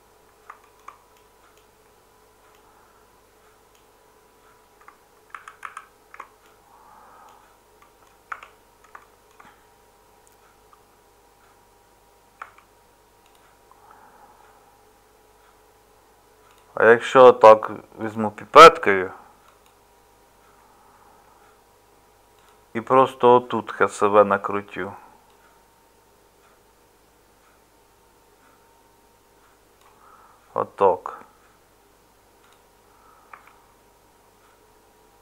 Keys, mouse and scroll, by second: 8.3 Tab, 12.4 Tab, 33.3 Tab.